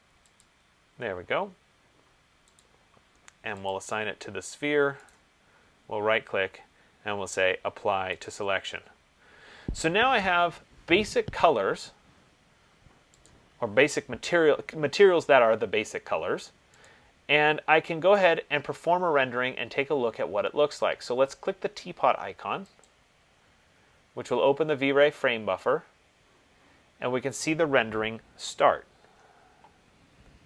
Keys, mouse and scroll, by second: 0.7 click, 5.3 right click, 8.5 click, 13.5 click, 17.1 click, 23.1 click.